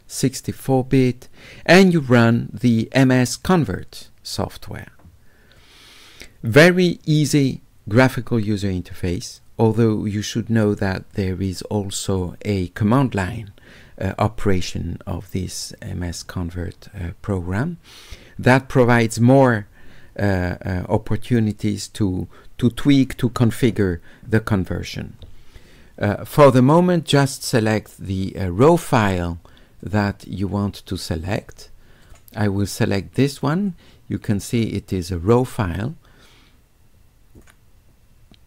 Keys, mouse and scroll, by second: 0.5 click, 3.5 click, 5.6 click, 27.5 click, 32.0 click, 33.7 click, 37.4 click.